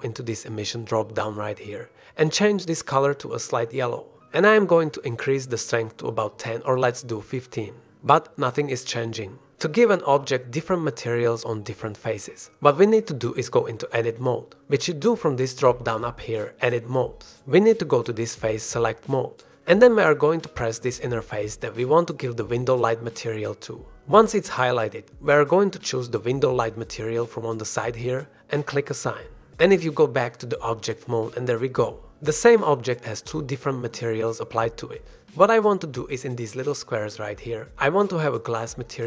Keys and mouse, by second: 7.4 click, 8.1-11.1 drag, 12.4-12.7 drag, 13.0-13.7 drag, 15.3 click, 15.9-18.0 drag, 22.1 click, 22.9 click, 28.4 click, 34.8 g, 36.3 shift+middle click, 37.4 middle click, 37.8 Tab.